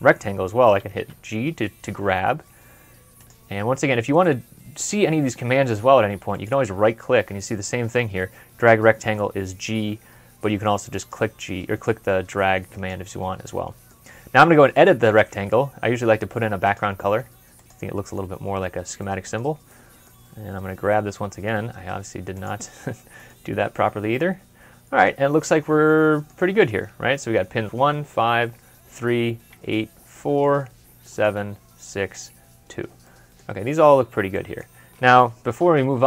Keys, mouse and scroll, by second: 0.8 middle click, 0.8 g, 3.8 typing, 6.2 g, 6.2 right click, 13.3 right click, 18.1 scroll up 1, 18.5 scroll down 1, 18.8 middle click, 21.3 g, 22.8 middle click, 30.0 middle click, 33.2 scroll up 1, 33.7-34.1 scroll down 1, 34.6 scroll up 1.